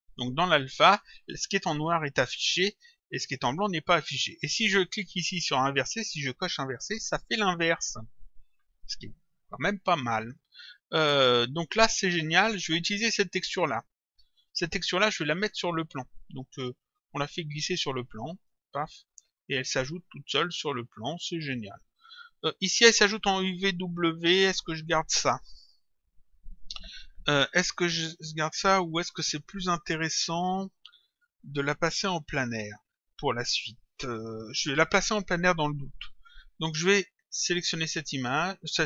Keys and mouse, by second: 0.1 click, 6.6 click, 10.2 click, 13.4 click, 16.8 click, 20.7 click, 37.5 click.